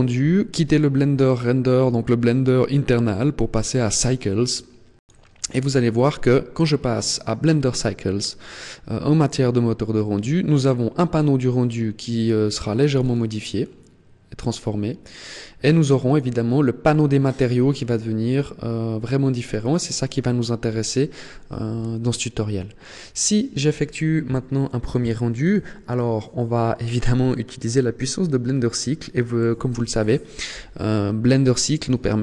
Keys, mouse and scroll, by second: 11.3-11.9 scroll down 5, 12.5-13.6 scroll up 7, 15.7 click, 19.1 click, 24.2-25.1 scroll up 1, 25.1-25.5 scroll down 1, 31.5 click.